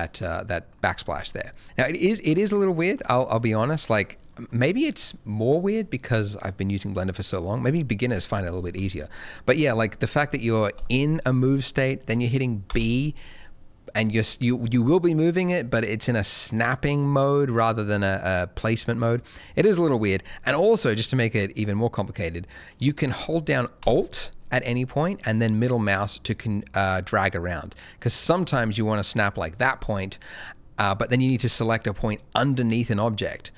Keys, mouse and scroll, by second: 0.0 middle click, 0.8-1.6 scroll down 2, 1.1 middle click, 2.8 shift+middle click, 3.0 shift+middle click, 3.5-6.3 scroll down 1, 6.3 middle click, 10.7 g, 12.6 b, 25.1 alt+middle click, 29.4 click, 32.1 alt+middle click.